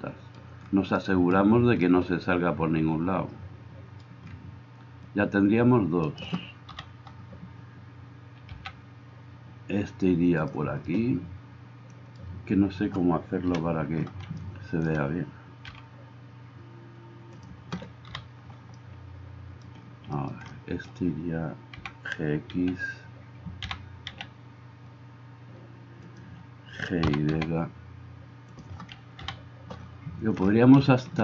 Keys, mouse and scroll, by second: 6.1 right click, 6.8-31.2 middle drag, 6.8 KP_7, 8.5 g, 13.5 KP_1, 15.7 g, 18.1 KP_7, 21.7 g, 22.6 x, 23.6 g, 27.0 g, 29.2 KP_7.